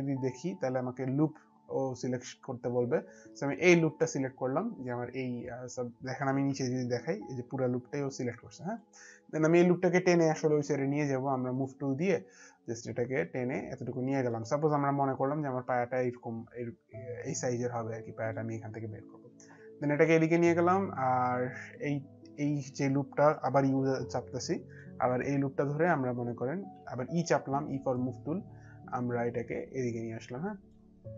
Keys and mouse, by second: 3.6 click, 6.6 alt+click, 12.8 click, 17.3 click, 21.6 click, 23.4-24.3 typing, 24.7 click, 28.0 click.